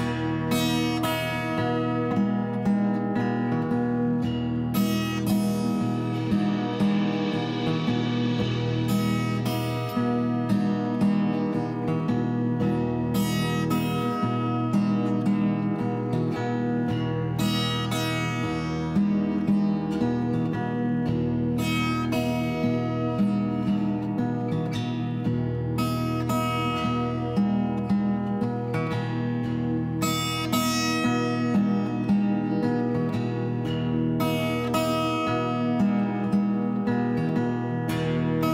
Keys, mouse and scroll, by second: 4.5 click, 5.3 click, 7.1 s, 7.3 z, 8.8 ., 9.0 5, 10.5 s, 10.7 z, 10.8 ., 11.1 2, 11.6 Return, 12.3 s, 12.5 z, 12.8 ., 12.9 2, 13.2 Return, 14.4 s, 14.5 x, 14.8 ., 15.3 5, 15.4 Return, 18.1 click, 18.8 click, 20.1 click, 20.7 click, 21.0 click, 21.7 Tab, 22.3 click, 24.0 click, 24.7 middle click, 26.8 click, 27.6 click, 28.1 shift+super+Tab, 29.4 s, 29.7 ., 29.9 5, 30.2 Return, 33.3 s, 33.5 z, 34.4 ..